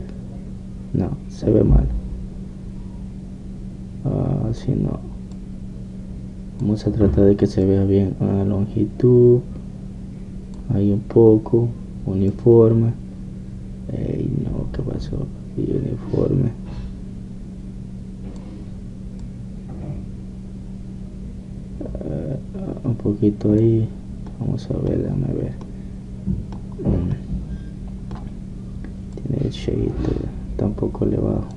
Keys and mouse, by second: 0.0-2.0 drag, 2.0 middle click, 6.4-8.3 drag, 8.3 middle click, 8.6-15.2 drag, 15.2-20.2 middle drag, 20.2-22.7 drag, 25.3-30.1 middle drag, 30.2-31.5 drag.